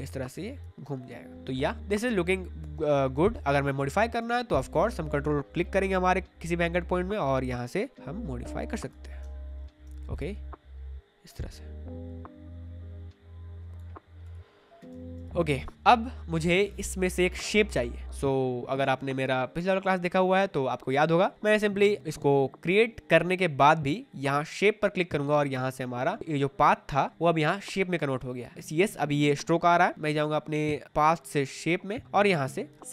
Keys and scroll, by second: 2.7 space, 9.2 space, 14.8 space.